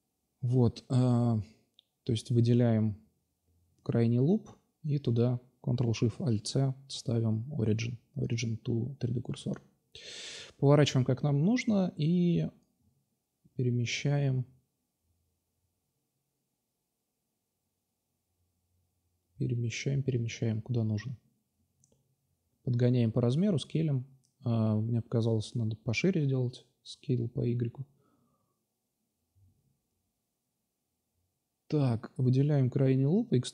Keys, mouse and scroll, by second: 0.1 Tab, 3.1 s, 3.9 r, 7.4 r, 8.4-9.6 drag, 9.6-10.9 middle drag, 11.2-12.1 middle drag, 12.1-14.1 drag, 14.1-14.8 middle drag, 14.8-15.7 drag, 15.4 s, 16.2-17.6 drag, 17.1 s, 17.6 middle click, 17.7 drag, 17.8 click, 20.3-20.7 drag, 21.6 s, 22.0 drag, 23.0 s, 25.1-25.9 drag, 26.5 shift+c, 29.8 ctrl+alt+shift+Tab, 32.9 e.